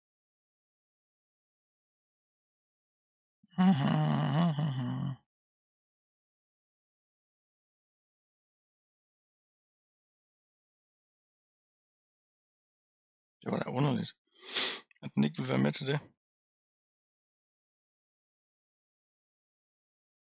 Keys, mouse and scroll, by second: 0.1 l, 2.0-3.3 scroll down 3, 3.4-4.6 scroll up 4, 5.5 scroll down 2, 8.3 click, 10.1-13.0 drag, 13.7-14.3 scroll down 4, 14.6-15.8 scroll up 3, 16.2-17.0 scroll down 1, 17.0-19.7 middle drag, 19.7-20.3 scroll up 2.